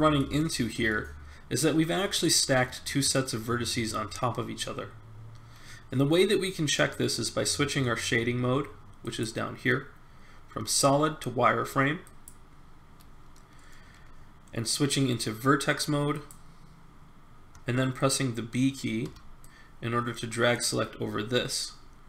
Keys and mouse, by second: 0.0 middle click, 0.8 middle click, 16.1 click, 19.0 b.